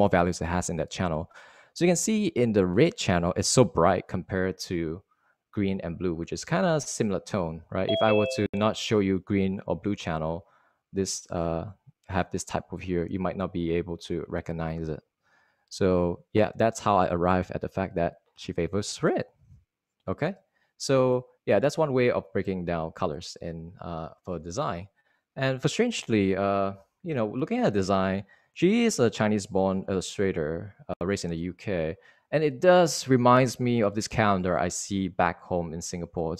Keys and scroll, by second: 21.5 super+Tab, 33.6 Right.